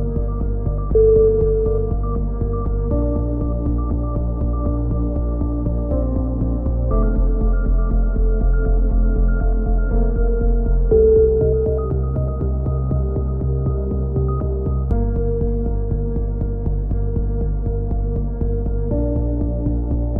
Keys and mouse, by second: 1.3 click, 1.4-2.7 middle drag, 2.7 click, 3.8 right click, 4.4 middle click, 4.8 click, 5.4 a, 5.6 middle click, 6.3 right click, 6.7 click, 7.2 right click, 8.5 a, 8.9-10.3 right drag, 9.7-10.7 drag, 11.7 a, 11.8-12.8 middle drag, 12.9-14.4 middle drag, 14.7-15.7 right drag, 15.7-17.6 drag, 18.9-20.1 drag, 19.9 a.